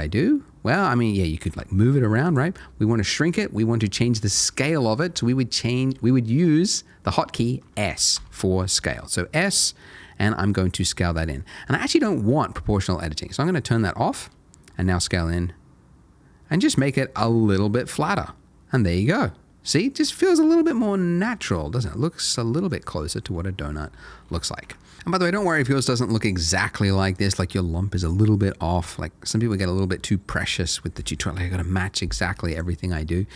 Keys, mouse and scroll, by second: 1.5 g, 2.2 right click, 8.1 s, 12.0 Escape, 14.1 click, 14.8 s, 16.7 click, 17.1 Tab, 17.6 middle click, 24.6 Tab, 24.9 click, 25.7 middle click, 26.5 Tab, 26.8 middle click, 27.7 middle click, 32.5 click, 32.9 middle click.